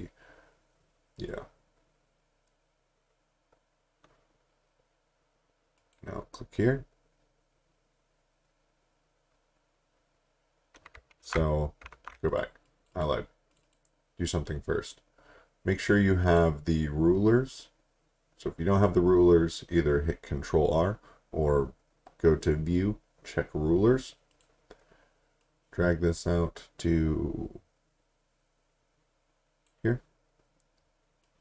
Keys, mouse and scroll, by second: 5.8 click, 11.2 ctrl+z, 11.9 z, 12.3 click, 16.3 click, 24.3 click.